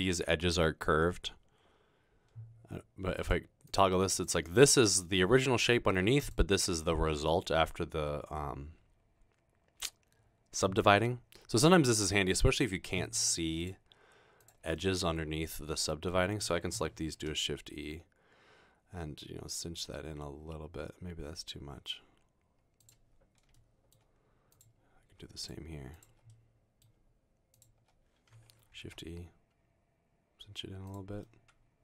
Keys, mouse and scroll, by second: 3.3 click, 3.7 click, 6.2 click, 17.2 e, 22.8 click, 23.6 middle click, 26.3 middle click, 29.0 e, 30.9 click, 31.7 middle click.